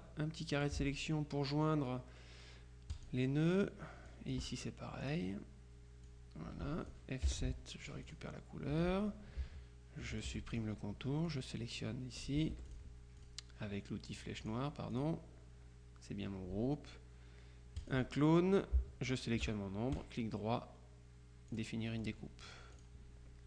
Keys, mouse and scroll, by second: 3.0 click, 4.2 click, 5.1 click, 6.1-7.5 drag, 7.3 F7, 7.9 i, 8.1 click, 8.8 F2, 10.2 shift+click, 11.3 click, 12.6 F1, 12.7 click, 14.3 click, 17.9 click, 19.2 shift+click, 20.0 right click, 21.6-22.6 drag, 22.8 click.